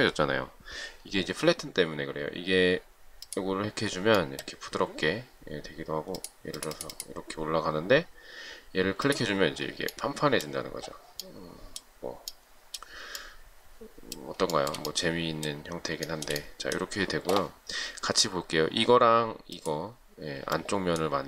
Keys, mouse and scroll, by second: 14.8 shift+middle click.